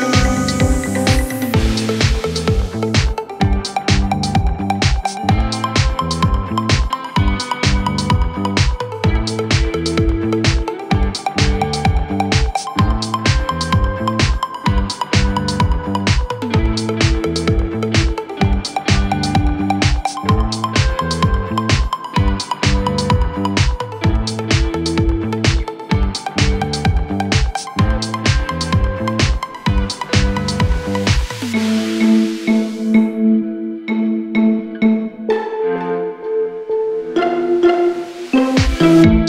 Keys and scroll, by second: 0.5 4, 4.8 3, 5.5 ], 15.0 Delete, 20.4 f, 26.9 F3, 37.3 4, 39.0 3.